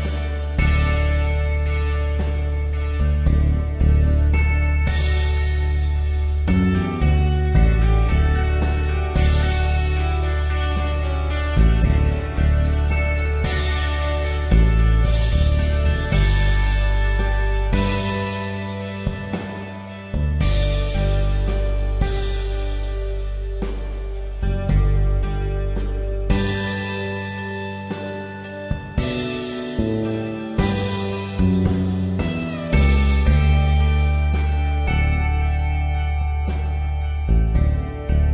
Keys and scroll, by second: 14.6 b, 18.0 e, 19.5-20.5 typing, 25.7 ctrl+alt+z, 26.4 [, 29.0 typing, 35.6 F3.